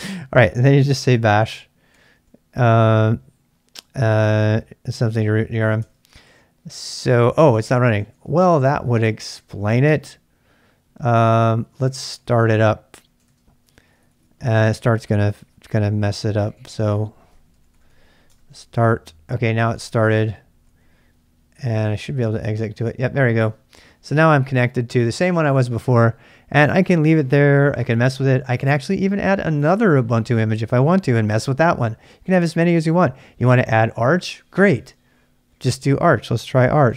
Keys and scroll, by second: 0.6-2.4 typing, 5.8 Return, 7.8-9.8 typing, 11.3-18.0 typing, 14.6 ctrl+[, 18.3 Return, 19.7 ctrl+[, 19.8 k, 20.6 k, 21.9 Return, 23.9-24.8 typing, 36.3-36.9 typing.